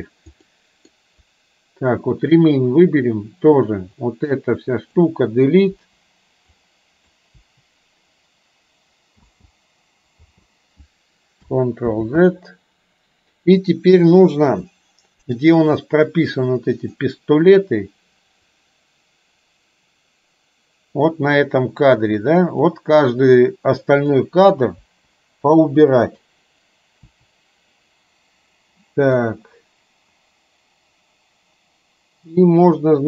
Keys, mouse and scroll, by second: 0.6 middle click, 2.2 click, 4.1-5.1 drag, 5.9 Delete, 6.6-7.2 drag, 7.5 Delete, 9.4 space, 10.4 space, 12.1 ctrl+z, 18.5-21.2 drag, 22.6-24.1 drag, 25.0 Delete, 25.9-26.2 drag, 27.1 Delete, 29.4-33.0 drag.